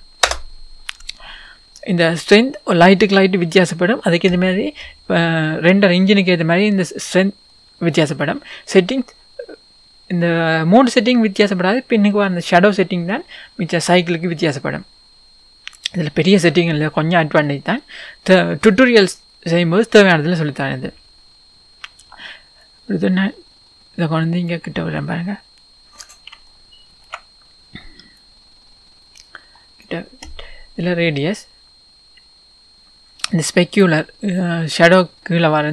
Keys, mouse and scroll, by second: 0.3-7.5 drag, 0.3 KP_0, 1.5-2.5 scroll down 2, 2.5-3.8 scroll down 1, 3.8-4.5 scroll down 1, 4.5-6.5 scroll down 1, 6.5-7.5 scroll down 1, 7.5 scroll down 1, 7.5-10.5 middle drag, 18.2-18.6 scroll up 1, 18.6-19.0 scroll down 1, 21.0 scroll up 1, 21.6-22.8 scroll down 1, 22.8 click, 24.9-26.3 scroll up 1, 26.5-28.3 shift+middle drag, 27.4-28.3 scroll down 2, 28.3 click, 31.7-35.7 drag.